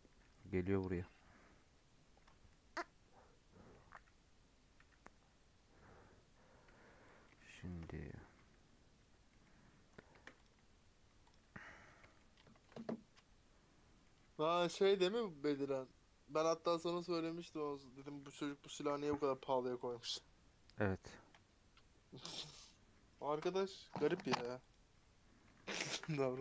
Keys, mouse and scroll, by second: 3.9 /, 4.7 /, 6.7-7.0 scroll down 1, 7.0 middle click, 7.2 shift+scroll up 1, 7.4 shift+middle click, 7.7 shift+scroll down 1, 7.8 middle drag, 8.0-8.6 scroll up 4, 8.6 Tab, 9.1 scroll down 4, 9.2 middle click, 9.6 scroll down 7, 10.4 click, 10.5 Tab, 10.9 Tab, 11.3 click, 11.4 Tab, 11.7 Tab, 11.9-14.6 middle drag, 14.6 a, 15.2 Tab, 15.7 Tab.